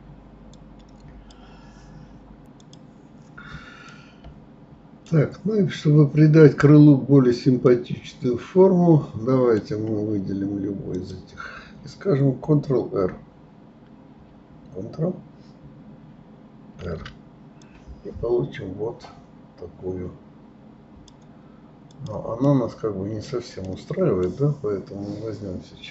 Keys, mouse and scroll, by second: 4.1-5.7 middle drag, 5.7-6.0 scroll up 2, 6.3 scroll down 2, 7.1-7.8 scroll up 1, 7.8-10.8 middle drag, 11.1 click, 22.6-25.9 middle drag.